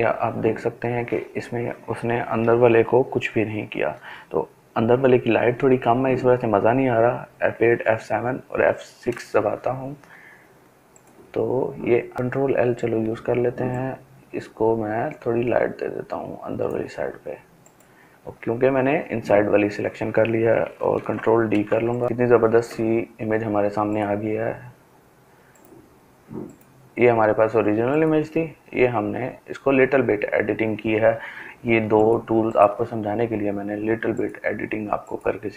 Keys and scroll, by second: 4.4 shift+F8, 6.1 shift+F7, 6.8 shift+F6, 12.1 l, 19.6 ctrl+d, 21.7 ctrl+space.